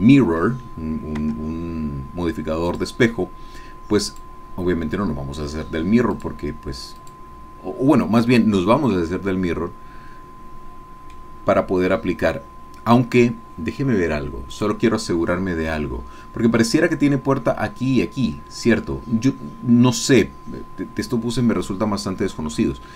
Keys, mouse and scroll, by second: 1.3 Tab, 2.7 click, 4.1 click, 6.1 click, 7.0 click, 8.3-11.3 middle drag, 14.5 click, 22.1-22.6 scroll down 1.